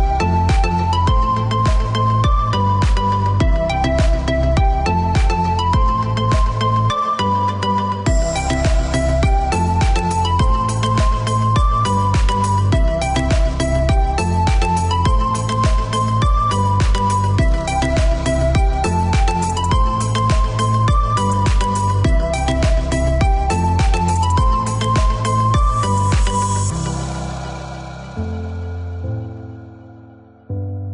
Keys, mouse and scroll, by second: 1.4 click, 2.2 space, 3.0 click, 3.8 click, 7.2 click, 10.2 KP_5, 10.5 KP_0, 10.6 KP_Enter, 11.9 click, 13.1-14.1 scroll up 1, 14.1 click, 15.5 space, 16.2 click, 17.2-17.8 scroll up 1, 17.8-18.1 scroll down 1, 19.0 click, 22.2 click, 22.8 Escape, 24.1 click, 24.7 space, 25.6 click, 26.4 click.